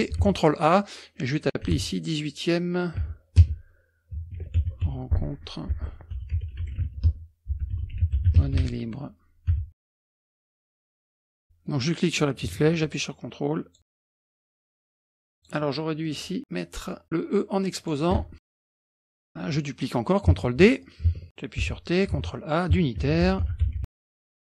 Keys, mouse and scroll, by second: 0.3 ctrl+a, 1.7 KP_1, 1.9 KP_8, 3.1-9.8 typing, 10.4 click, 10.5 middle click, 10.8 KP_Subtract, 10.9 KP_Subtract, 11.0 middle click, 11.4 middle click, 12.1-12.7 scroll down 2, 12.7 ctrl+scroll down 1, 13.0 ctrl+click, 13.8 ctrl+scroll up 3, 14.0-14.4 scroll down 2, 14.4 scroll up 2, 14.6 click, 15.1 ctrl+click, 16.0 click, 17.8 click, 18.6 click, 19.2-19.8 scroll up 2, 20.5 ctrl+d, 20.8 click, 21.6 t, 22.1 ctrl+a, 22.8-24.5 typing.